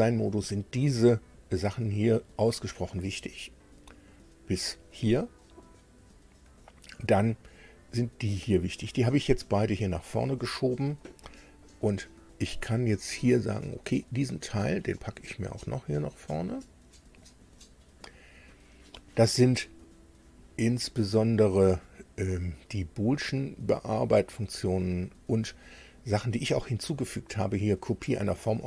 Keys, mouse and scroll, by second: 14.1-17.3 drag.